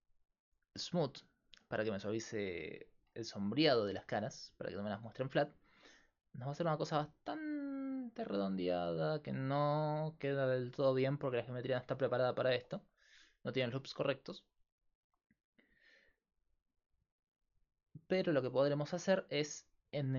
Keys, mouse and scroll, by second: 3.3-6.9 middle drag, 12.4-14.7 middle drag, 14.7-18.1 drag, 18.3 middle click.